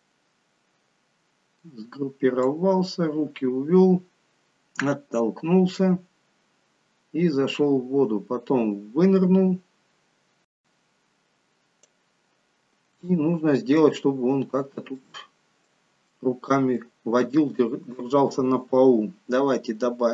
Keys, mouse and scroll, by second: 2.7 click, 13.2 shift+middle click, 14.1-15.3 scroll up 5, 14.9 middle click.